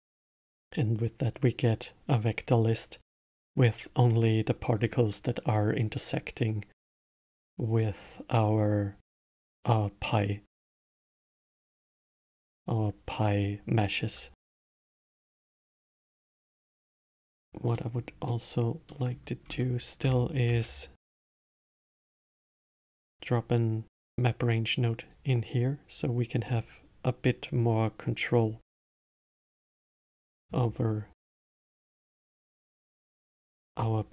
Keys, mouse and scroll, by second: 1.1-4.1 drag, 15.1-17.0 middle drag, 17.0 scroll down 3, 17.5-19.8 middle drag, 19.8-20.8 scroll up 3, 20.8 shift+a, 26.8-28.7 scroll up 2, 28.7-31.7 drag, 32.2-34.1 drag.